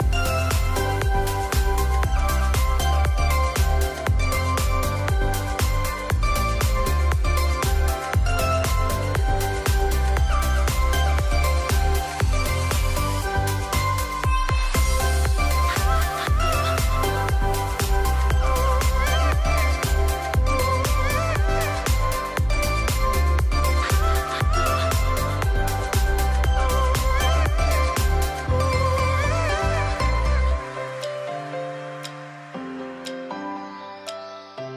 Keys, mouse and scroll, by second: 0.9 space, 1.0-3.0 drag, 8.8-9.2 alt+scroll down 1, 9.9 click, 11.5-12.2 alt+scroll down 3, 12.8 alt+click, 13.1 alt+click, 14.4 ctrl+Return, 15.7 shift+F6, 16.7 Return, 17.6 j, 18.7 d, 19.7 ctrl+[, 22.2 click, 23.3 m, 24.5-26.1 drag, 26.7 ctrl+j, 27.6-28.2 click, 31.8 click.